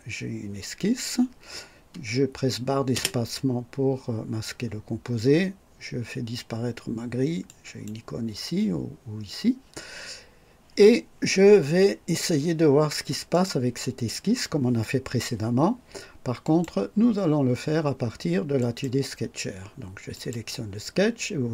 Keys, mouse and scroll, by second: 2.9 space, 7.4 click, 13.3 click, 16.4 click, 18.5 click, 20.1 click.